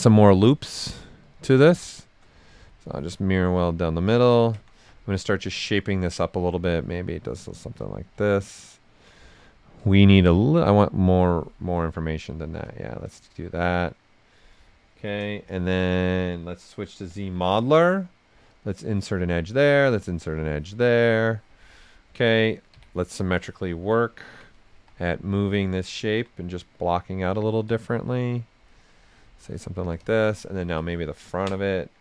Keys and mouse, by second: 0.9 click, 2.7 click, 3.2 ctrl+right click, 4.2 ctrl+click, 4.7 w, 5.3 click, 6.6 alt+right click, 8.6 ctrl+click, 10.4 click, 11.6 right click, 12.4 shift+f, 13.0 right click, 13.3 shift+f, 14.9 q, 15.4 f, 16.7-17.9 typing, 18.5 click, 19.6 click, 20.7 alt+right click, 22.7 x, 23.4-24.7 ctrl+drag, 24.7 w, 25.6 alt+click, 26.4-28.4 drag, 28.4 right click, 30.0-32.0 ctrl+drag.